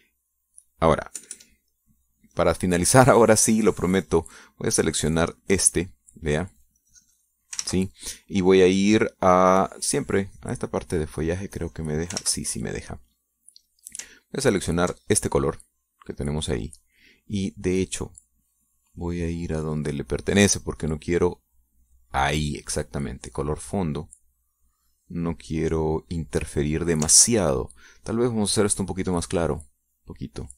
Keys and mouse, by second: 0.3 middle click, 0.9 middle click, 1.5-2.6 drag, 2.8 KP_Add, 3.3 click, 6.8 click, 8.4 click, 9.2 ctrl+z, 12.3 click, 13.1 click, 13.8 ctrl+z, 14.3 ctrl+click, 14.9 click, 16.3 ctrl+click, 20.6-22.2 drag, 23.0 click, 23.4 click, 24.4 click, 25.8-28.3 drag, 28.7 ctrl+z.